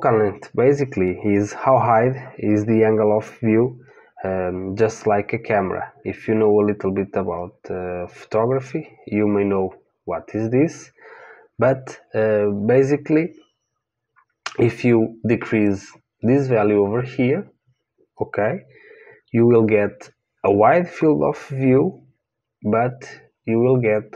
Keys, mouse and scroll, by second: 15.7 click, 19.9-21.7 middle drag.